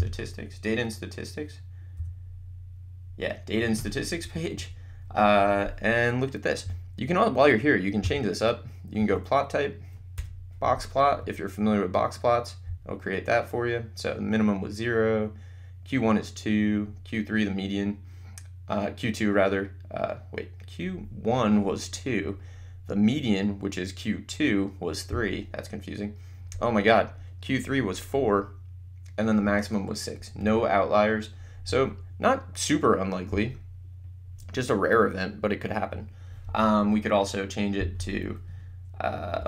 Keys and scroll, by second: 2.1 4, 4.3 Escape, 8.1 Menu, 9.2 Right, 10.1 Return, 37.9 Menu.